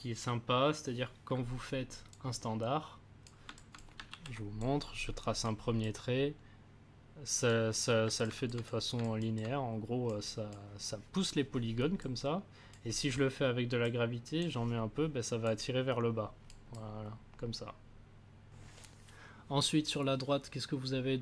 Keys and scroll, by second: 4.1 ctrl+z.